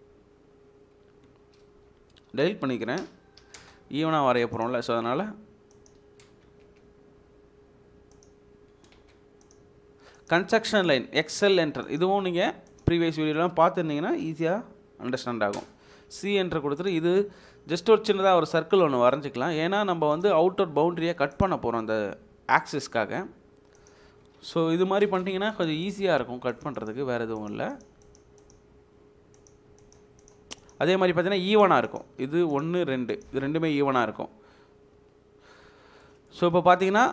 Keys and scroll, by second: 1.7 Delete, 3.3 typing, 6.0 Escape, 6.5 space, 8.7 Escape, 9.2 space, 10.4 Escape, 11.2 space, 12.9 Escape, 15.5 c, 15.5 space, 20.3 space, 24.0 Escape, 24.9 typing, 27.2 space, 30.8 Escape, 33.8 Delete.